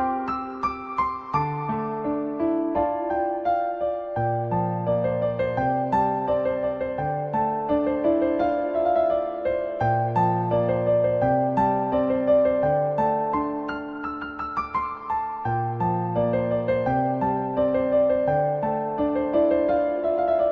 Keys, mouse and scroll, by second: 1.3 shift+middle click, 2.0 `, 2.9-3.6 middle drag, 4.4 middle drag, 5.1 shift+middle click, 5.4 middle click, 5.8 Tab, 6.1 middle click, 6.4-7.5 scroll down 1, 7.8 ctrl+b, 9.5 middle click, 9.7 2, 10.4 middle click, 10.8 click, 11.2 middle click, 12.4 click, 12.7 middle click, 13.6 middle click, 14.3 middle click, 14.9 ctrl+b, 18.1 middle click, 18.5 Tab, 18.8 middle click, 20.1 Tab.